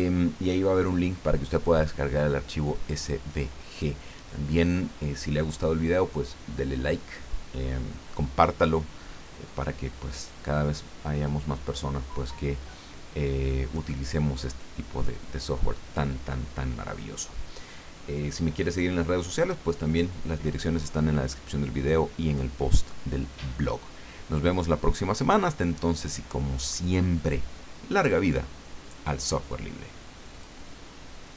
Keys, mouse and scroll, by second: 30.3 click.